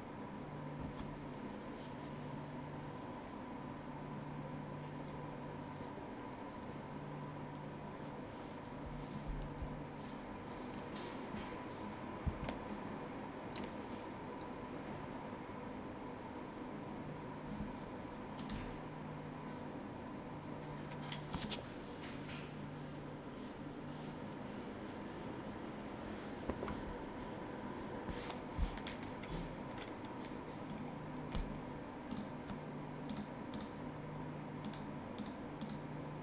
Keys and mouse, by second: 18.4 click, 21.3 click, 32.1 click, 33.1 shift+click, 34.6 shift+click.